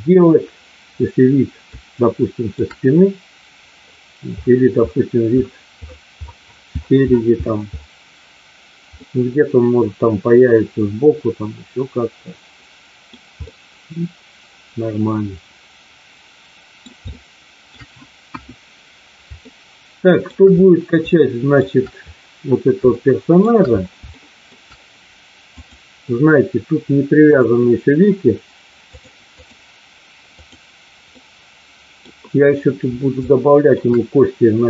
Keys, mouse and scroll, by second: 1.6-2.5 shift+middle drag, 8.9-13.1 middle drag, 13.4-16.8 middle drag, 17.0-17.8 shift+middle drag, 18.3 KP_1, 19.4-20.3 shift+middle drag, 21.0-21.6 shift+middle drag, 22.9-23.3 shift+middle drag, 24.0-24.4 shift+middle drag, 25.4 click, 27.3 click, 28.8-29.5 drag, 30.3 click, 31.1 middle click, 33.3 shift+middle click.